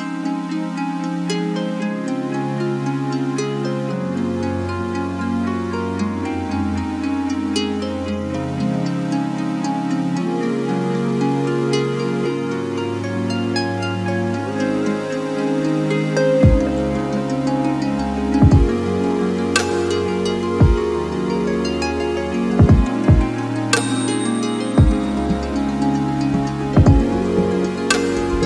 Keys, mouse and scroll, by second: 0.1 shift+click, 1.0 shift+click, 2.2-3.4 shift+drag, 3.8-5.2 shift+drag, 5.5 shift+click, 7.0 shift+click, 8.8 click, 9.7-11.3 shift+drag, 12.0 shift+click, 15.1 click, 16.1 Delete, 18.4 click, 19.2 click, 20.3 click, 21.4 ctrl+d, 22.7 click, 24.2 click, 28.2 alt+Down.